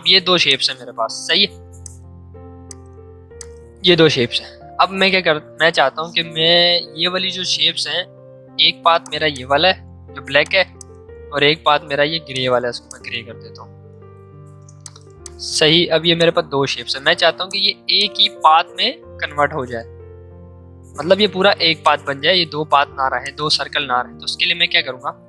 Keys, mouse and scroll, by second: 8.9 click, 13.6 ctrl+z, 14.4 ctrl+shift+z, 14.8-21.7 drag.